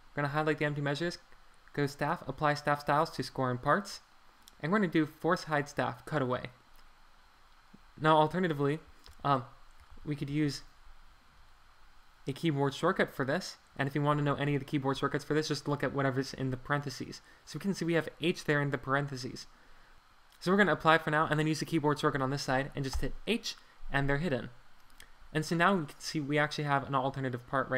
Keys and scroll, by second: 9.1 super+z, 9.9 super+z, 22.9 h, 24.0 Escape.